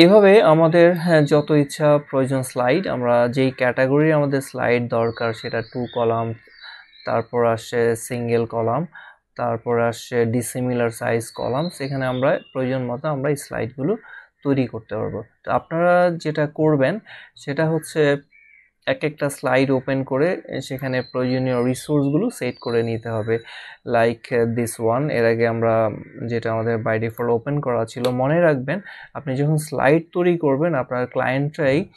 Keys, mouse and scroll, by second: 20.7 click, 27.1 click, 27.2 click.